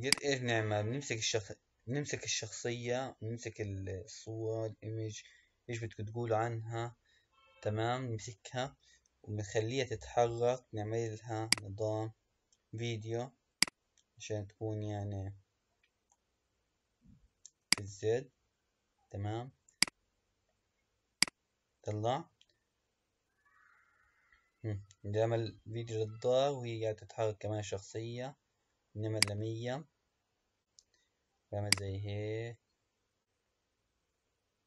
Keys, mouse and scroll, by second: 0.0 click, 11.6 click, 13.5 click, 17.8 click, 19.7-21.3 drag, 29.8-31.9 drag.